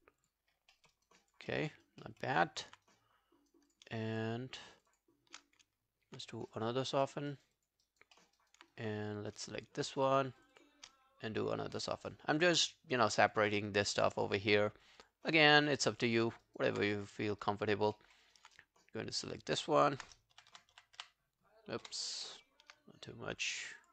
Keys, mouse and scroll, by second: 0.2 double click, 0.5 scroll down 3, 0.8 alt+middle click, 1.0 alt+right click, 1.2 alt+click, 1.5 alt+middle click, 1.7 alt+right click, 2.1 alt+middle click, 2.3 alt+right click, 2.5 alt+click, 2.9 right click, 4.8 shift+click, 6.8 scroll down 2, 7.1 alt+middle click, 7.3 alt+right click, 7.6 alt+click, 7.9 alt+right click, 8.2 alt+middle click, 8.4 alt+right click, 8.7 right click, 10.0 double click, 10.4 shift+click, 10.6 shift+click, 13.0 scroll down 2, 13.2 alt+click, 13.7 right click, 14.6 scroll down 2, 14.9 alt+click, 15.3 alt+middle click, 15.6 alt+right click, 15.8 alt+click, 16.3 alt+middle click, 16.5 alt+right click, 17.2 alt+scroll down 1, 17.5 alt+right click, 18.0 alt+middle click, 18.0 alt+scroll down 1, 18.3 alt+right click, 18.6 right click, 20.4 shift+., 20.5 shift+., 20.8 shift+., 21.0 shift+., 23.8 double click.